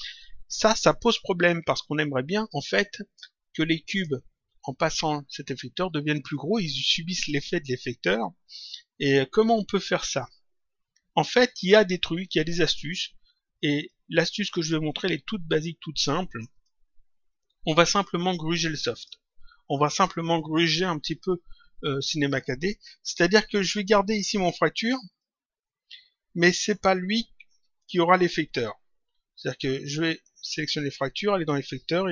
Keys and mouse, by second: 3.1 click, 13.8 click, 16.4 click, 18.9 click, 25.0 click, 30.4 click.